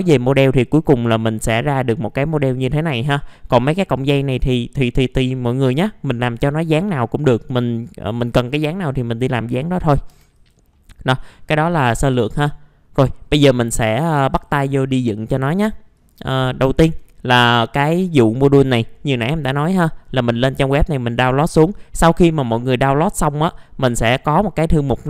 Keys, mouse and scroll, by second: 0.0 scroll down 1, 0.8-1.9 middle drag, 3.1 scroll down 1, 3.3 scroll up 1, 3.5 middle click, 7.0-7.4 scroll up 1, 8.6-9.5 scroll down 1, 9.5 middle click, 10.1 F4, 10.4 click, 10.7 middle click, 12.3 click, 15.4 middle click, 15.9 click, 16.7 alt+middle click, 19.6-22.9 drag, 23.6 click.